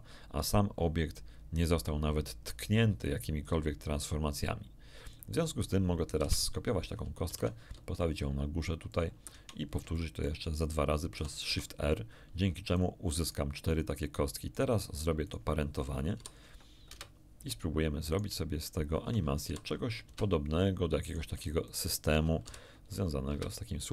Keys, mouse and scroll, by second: 3.4 click, 5.0 click, 6.1 KP_1, 7.2 shift+d, 8.9 ctrl+click, 9.9 ctrl+shift+middle click, 11.1 shift+r, 11.4 shift+r, 12.6 click, 13.2 right click, 13.7 right click, 14.4 right click, 15.2 shift+right click, 16.1 ctrl+shift+p, 16.9 Return, 18.1 shift+right click, 18.6 shift+right click, 19.4 ctrl+shift+p, 20.0 Return, 21.0 click, 21.6 shift+click, 22.4 ctrl+shift+p, 23.3 Return.